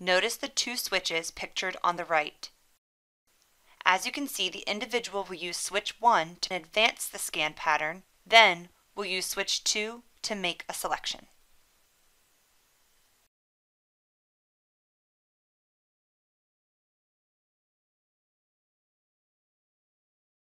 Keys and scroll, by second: 3.5 1, 5.3 1, 12.5 1, 15.8 2.